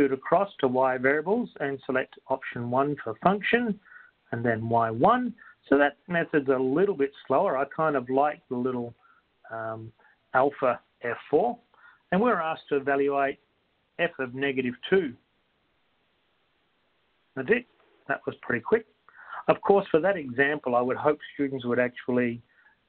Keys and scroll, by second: 3.3 1, 5.9 1, 7.3 (, 7.9 (, 10.3 Left, 10.3 Delete, 15.1-15.8 typing, 16.9 Return.